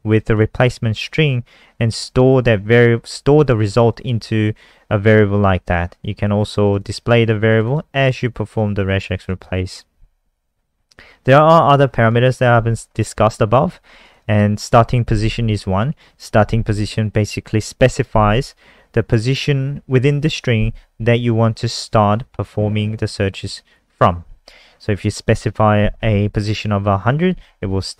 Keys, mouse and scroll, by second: 0.1 click, 0.2 click, 3.6 click, 3.8 click, 6.6 click, 6.7 click, 7.5 click, 7.6 click, 8.5 click, 10.3-10.7 scroll down 2, 11.7 click, 12.4 scroll down 1, 13.9 click, 14.1 click.